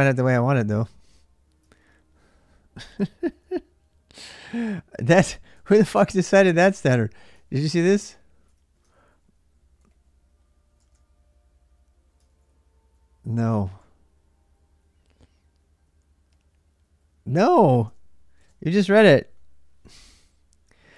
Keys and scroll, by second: 3.2-4.0 typing.